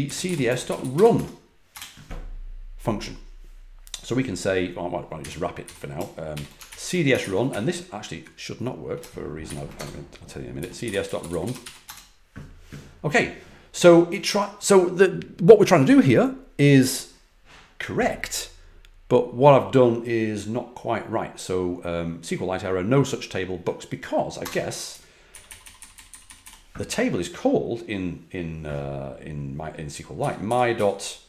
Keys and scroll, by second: 0.0-2.1 typing, 4.9-6.2 typing, 6.6 super+Left, 7.1 ctrl+Left, 7.7 Left, 7.7 Left, 9.4-12.0 typing, 24.3 Return, 24.8 Up, 25.2 Left, 25.4 Left, 25.6 Left, 25.7 Left, 25.9 Left, 26.0 Left, 29.9-31.2 typing.